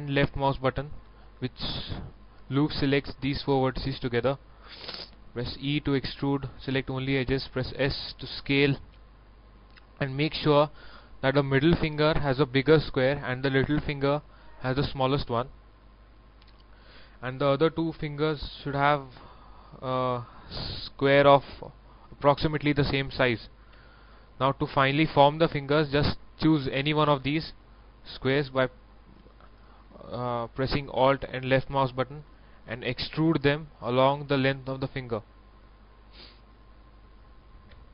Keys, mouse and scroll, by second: 0.1 alt+right click, 1.4 middle click, 2.2 shift+middle click, 2.6-5.6 shift+middle drag, 5.6 e, 6.2 click, 7.4 s, 9.5 click, 9.8 middle click, 11.8 right click, 15.8 middle click, 17.4-20.1 right drag, 20.1 scroll down 1, 20.6 middle click, 23.7 KP_1, 24.7-27.5 middle drag, 28.5 alt+right click, 30.9 alt+KP_1, 32.2 shift+middle click, 33.2 shift+e, 33.5-34.5 drag, 36.2 middle click, 37.1 alt+right click.